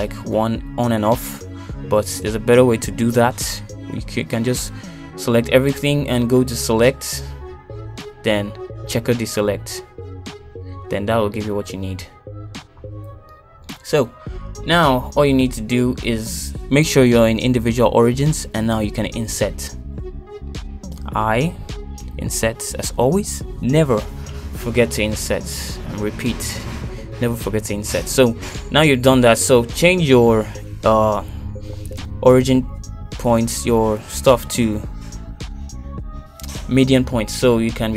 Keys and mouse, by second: 0.8 ctrl+click, 1.9 click, 2.5 middle click, 3.1 shift+click, 3.9 shift+click, 4.2 middle click, 5.3 shift+click, 6.0 middle click, 7.3 click, 7.6 click, 10.3-13.0 drag, 15.7 shift+click, 16.1 shift+click, 20.6-22.6 middle drag, 24.0 i, 29.8 middle click, 30.9 KP_7, 31.7 shift+middle click, 32.9 shift+z, 35.0 e, 36.2 s.